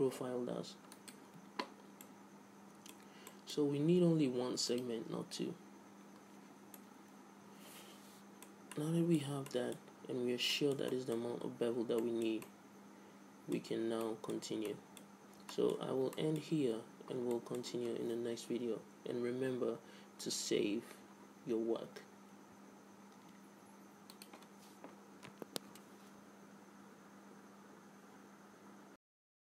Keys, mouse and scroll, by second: 2.2-4.1 middle drag, 2.3 z, 3.4 z, 5.7-7.0 drag, 6.7 t, 7.0-8.4 middle drag, 9.5 middle click, 10.1-19.4 middle drag, 23.6 ctrl+s.